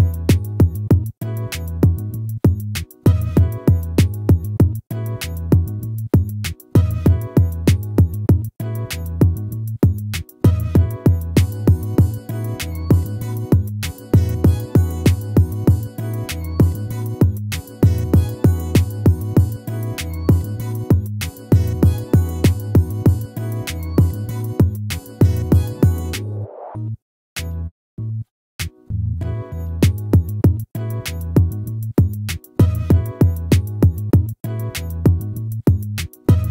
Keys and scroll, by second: 11.4 ctrl+-, 25.3 ctrl+-.